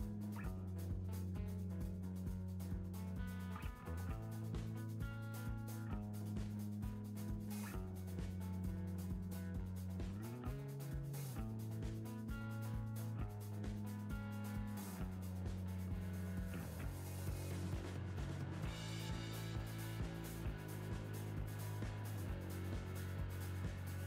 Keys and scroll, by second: 16.5 Return.